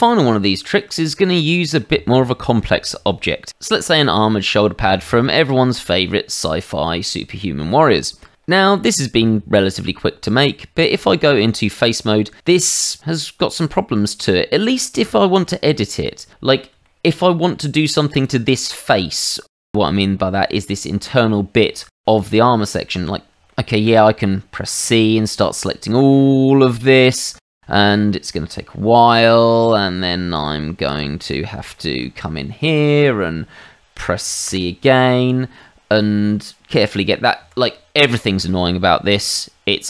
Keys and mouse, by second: 1.4 middle click, 2.3 shift+middle click, 7.7 middle click, 9.8 Tab, 12.0 middle click, 13.0 middle click, 14.2 middle click, 15.9 middle click, 16.8 shift+middle click, 17.4 middle click, 18.1 click, 19.5 middle click, 21.1 middle click, 21.8 shift+middle click, 22.5 middle click, 23.5 shift+middle click, 24.6 c, 24.9 click, 30.8 click, 31.2 Escape, 31.7 shift+middle click, 32.5 shift+middle click, 32.9 middle click, 34.4 c, 35.3 click, 37.4 Escape, 38.2 shift+middle click, 39.1 click.